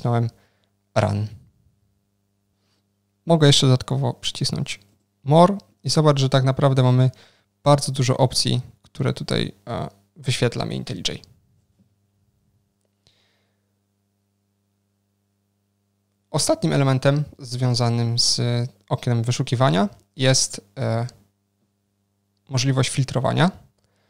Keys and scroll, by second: 21.1 ctrl+shift+super+o.